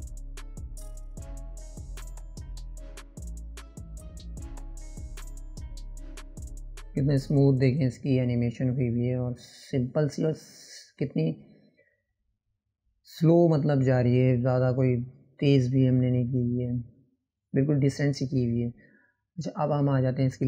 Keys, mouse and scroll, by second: 0.0-2.4 drag, 6.6 click, 12.9-15.8 drag.